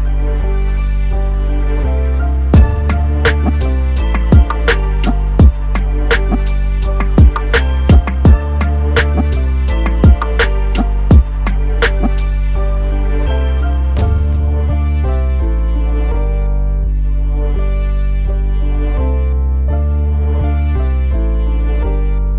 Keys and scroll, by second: 2.6 ctrl+d, 8.5 ctrl+t.